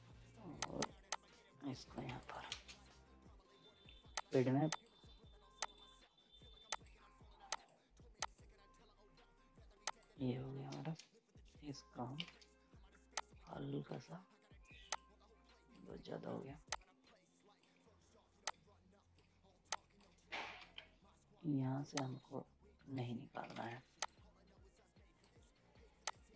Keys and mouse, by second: 0.6 click, 2.0 z, 2.1 right click, 2.5 space, 4.1 click, 11.3 shift+Left, 13.1-16.7 drag, 16.7-18.4 drag, 18.4 click, 20.6 F10, 21.9-23.5 drag, 23.5 ctrl+z, 24.0-26.3 drag.